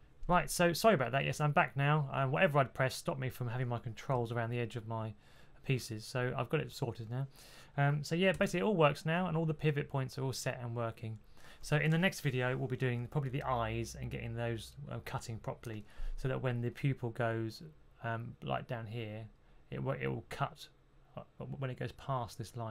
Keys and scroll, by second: 4.0 b, 8.2 b.